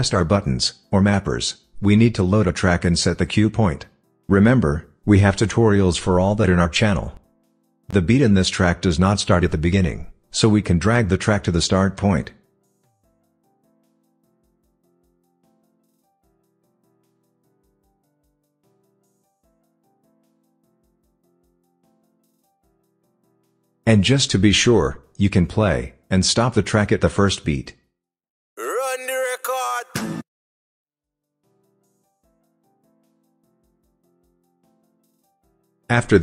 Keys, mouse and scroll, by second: 1.6-3.2 typing, 4.5 click, 14.4-17.2 drag, 21.9 s.